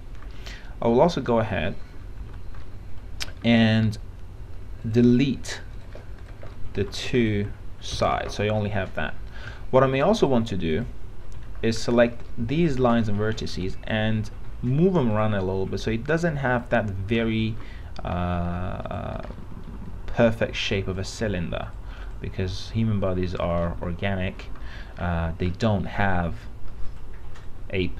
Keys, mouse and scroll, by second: 0.6 alt+middle click, 1.4 alt+middle click, 2.4 alt+x, 2.8 alt+middle click, 3.6 right click, 5.0 click, 6.7 alt+middle click, 7.4 ctrl+click, 8.2 ctrl+Delete, 10.4 click, 12.6 alt+middle click, 13.6-17.3 drag, 17.4 alt+middle click, 19.0 click, 20.4-23.9 drag, 23.9 alt+middle click, 24.9 middle click, 27.1 click.